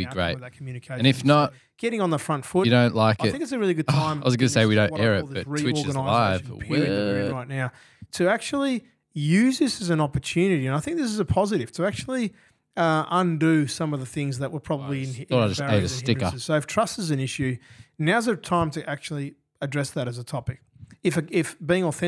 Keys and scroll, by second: 3.5 g.